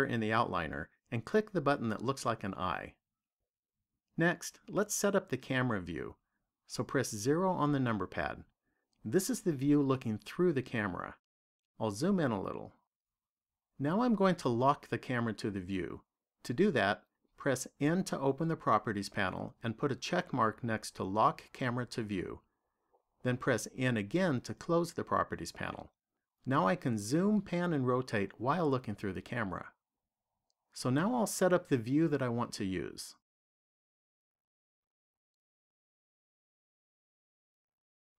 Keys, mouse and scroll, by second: 1.6 click, 6.9 KP_0, 12.1-15.8 scroll up 2, 18.2 n, 20.4 click, 23.6 n, 31.0-32.0 scroll up 1, 32.0 scroll up 1, 33.2 middle click, 37.6 shift+middle click.